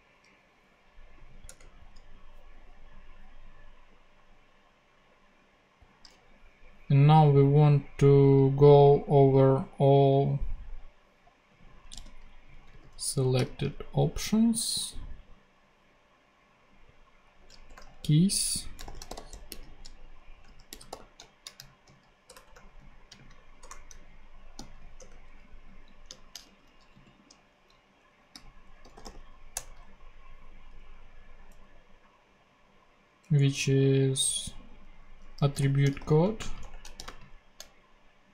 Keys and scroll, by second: 1.4 Return, 11.9 super+c, 12.7 super+v, 13.3 super+., 13.8 ., 17.6 BackSpace, 18.0 super+Left, 18.7 shift+super+Left, 18.8-24.5 typing, 24.9 Return, 25.6 Right, 26.4 shift+super+x, 26.6 super+Left, 26.9 super+v, 27.4 super+Right, 28.3 super+., 28.5-29.5 typing, 35.1-37.0 typing.